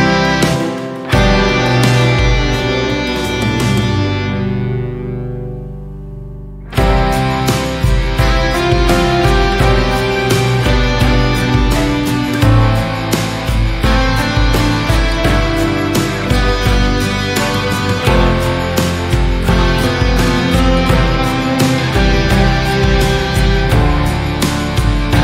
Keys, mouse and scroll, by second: 1.9-2.9 scroll up 2, 3.8-4.8 scroll down 1, 4.9 KP_7, 5.8-6.8 scroll down 2, 6.8-8.3 shift+middle drag, 8.3 Tab, 11.1 Tab, 11.4 1, 12.5 alt+z, 17.1 3, 18.3 click, 22.0 shift+middle click, 22.8-23.2 scroll up 2, 23.2-24.2 shift+middle drag, 24.2 shift+click.